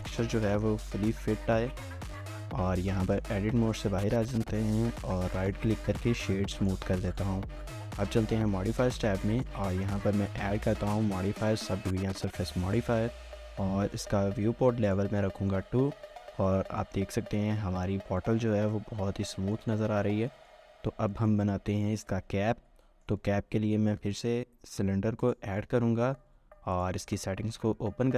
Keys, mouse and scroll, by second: 1.4 shift+middle click, 1.8 scroll up 1, 2.1 shift+middle click, 2.5 Tab, 2.8 scroll up 1, 3.1 shift+middle click, 5.4 right click, 15.2 scroll down 1, 15.4 shift+middle click, 17.6 middle click, 18.2 1, 18.5 shift+middle click, 19.5 shift+middle click, 19.9 scroll up 1, 20.4 shift+middle click, 20.7 scroll up 1, 21.7 shift+middle click, 22.8 shift+middle click, 23.8 a, 25.6 scroll down 1.